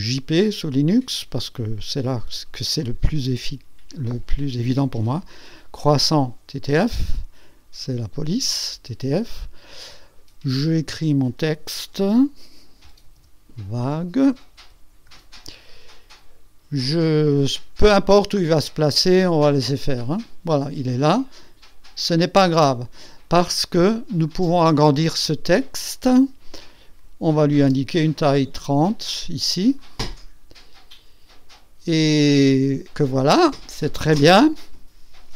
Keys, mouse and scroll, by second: 5.3 click, 7.8 click, 8.3 click, 10.7 click, 11.4 click, 13.0-15.1 typing, 19.5 click, 24.2 click, 27.4 KP_3, 27.7 KP_0, 29.8 click, 31.9 click.